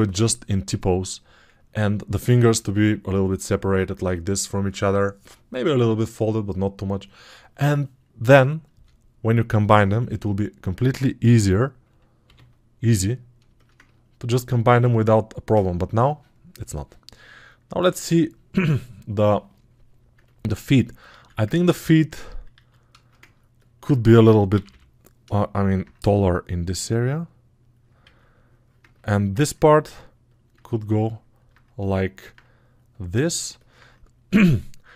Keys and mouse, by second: 21.3-22.8 ctrl+drag, 21.3-22.8 ctrl+right drag.